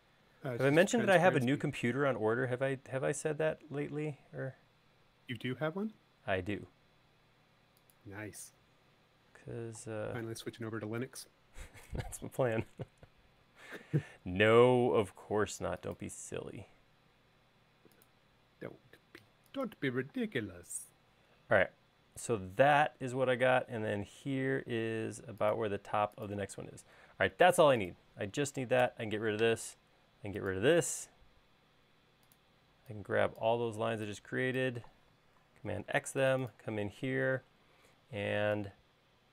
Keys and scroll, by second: 20.6 space, 23.7 i, 26.9 space, 29.0 BackSpace, 35.9 super+x.